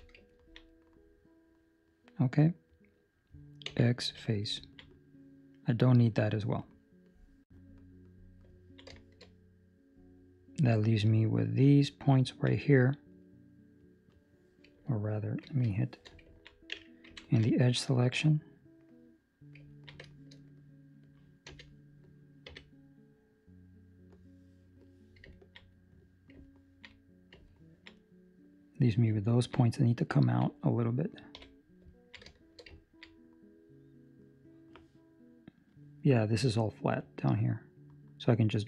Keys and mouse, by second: 0.3 ctrl+middle click, 0.6 middle click, 4.5 x, 4.6 ctrl+middle click, 4.8 middle click, 8.5 ctrl+middle click, 8.9 shift+middle click, 9.2 middle click, 12.2 ctrl+middle click, 13.7 right click, 15.7 shift+middle click, 18.6 2, 19.7 ctrl+middle click, 20.0 shift+middle click, 20.3 middle click, 21.4 z, 22.4 c, 25.3 ctrl+middle click, 25.7 middle click, 26.4 ctrl+middle click, 26.9 middle click, 27.4 ctrl+middle click, 27.9 middle click, 29.5 middle click, 29.6 middle click, 30.1 ctrl+middle click, 30.5 middle click, 31.3 KP_3, 31.8 ctrl+middle click, 32.5 shift+middle click, 32.9 ctrl+middle click, 36.9 click.